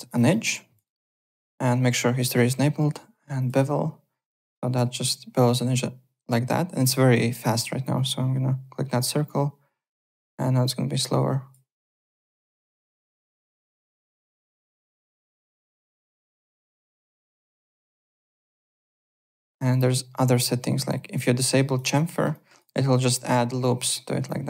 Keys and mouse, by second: 0.3 alt+middle click, 0.5 alt+click, 0.8 alt+right click, 1.1 alt+middle click, 3.4 click, 4.2 click, 4.9 click, 7.9 click, 9.0 click, 10.6 click, 11.8 click, 13.5 click, 15.5 alt+click, 16.7 alt+middle click, 17.0 alt+right click, 17.2 alt+click, 18.1 alt+click, 18.4 alt+middle click, 18.6 alt+right click, 18.9 click, 19.7 click, 20.8 click, 22.1 alt+middle click, 22.3 alt+click, 24.2 click.